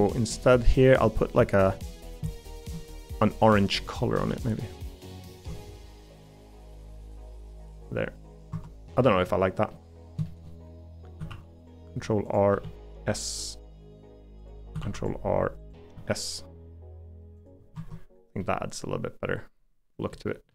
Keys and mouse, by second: 0.2 middle click, 0.8 shift+middle click, 1.5 shift+middle click, 2.6 shift+middle click, 2.9 g, 4.3 g, 5.4 Tab, 6.1-7.6 middle drag, 8.5 Tab, 9.0 middle click, 9.7 middle click, 10.2 shift+middle click, 10.8 middle click, 11.3 ctrl+r, 12.6 s, 15.0 ctrl+r, 15.9 s, 17.7 Tab, 18.4-20.1 middle drag, 20.3 middle click.